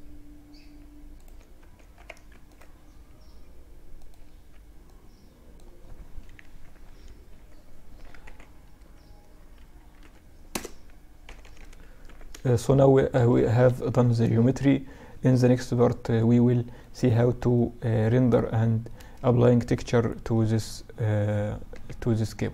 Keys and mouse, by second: 0.6 Tab, 1.1 Tab, 1.6 ctrl+r, 3.5 Tab, 4.1-6.1 drag, 5.6 KP_Subtract, 7.2 s, 10.5 KP_Subtract, 11.1 z, 11.3 z, 11.8-14.1 middle drag, 13.0 KP_Subtract, 15.6-17.1 middle drag, 17.3-21.1 middle drag, 21.1 ctrl+s.